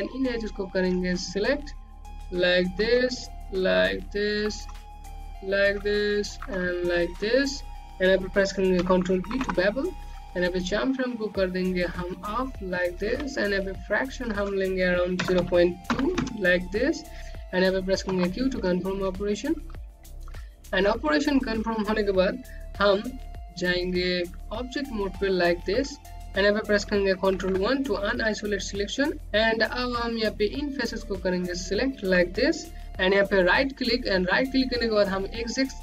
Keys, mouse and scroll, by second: 1.7 click, 5.0 shift+Num_Lock, 5.3 shift+click, 5.9 click, 6.1-6.8 typing, 7.4 click, 7.9 click, 8.0-8.7 typing, 8.9 click, 11.4 ctrl+b, 14.3 click, 17.2 q, 18.0 click, 18.6 q, 19.5 scroll down 1, 20.2 alt+click, 24.1 right click, 26.3 ctrl+1, 27.8 ctrl+1, 29.1 click, 32.9 right click.